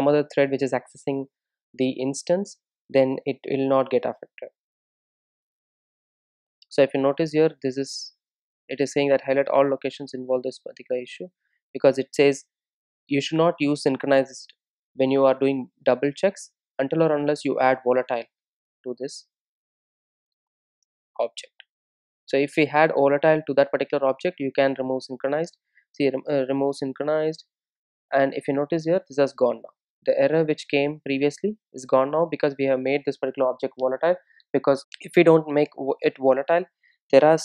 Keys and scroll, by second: 20.3 Return, 23.0 super+s.